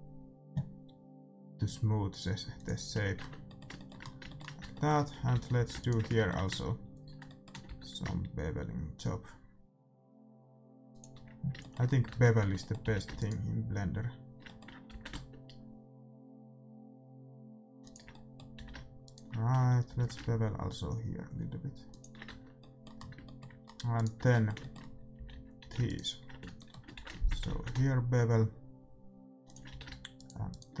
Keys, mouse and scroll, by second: 3.1 Tab, 3.3 middle click, 4.6 Tab, 5.1 a, 5.3 a, 5.5 a, 5.7-7.5 right drag, 7.2-8.9 middle drag, 7.6 ctrl+b, 11.3-12.3 middle drag, 12.0 Tab, 12.3 Tab, 12.8 a, 13.1-15.0 right drag, 14.9 ctrl+b, 15.0-16.3 middle drag, 18.2 middle click, 18.5 a, 19.0-21.0 right drag, 19.8 ctrl+b, 21.0 middle click, 22.2 Tab, 22.5 middle click, 23.9-25.7 right drag, 24.1 Tab, 25.1 a, 25.3 a, 25.6 a, 25.7 middle click, 25.8-27.7 right drag, 27.5 ctrl+b, 27.7-28.7 middle drag, 29.6 a, 30.1-30.8 right drag.